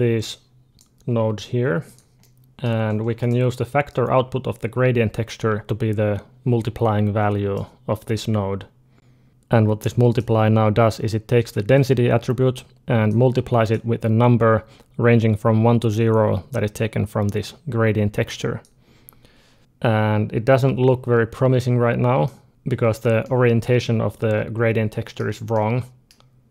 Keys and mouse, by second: 0.1-2.5 drag, 1.7 g, 2.5 middle click, 3.0-7.4 drag, 9.3 click, 9.9-15.5 drag, 16.3-18.4 drag, 22.1 middle click, 23.0-25.0 middle drag, 25.4-26.5 middle drag.